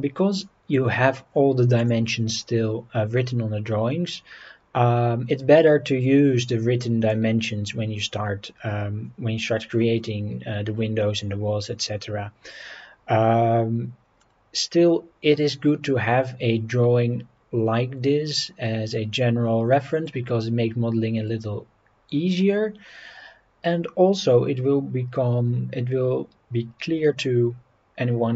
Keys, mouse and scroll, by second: 1.8 click, 2.4 scroll up 3, 12.6 scroll down 1, 14.2 scroll down 1.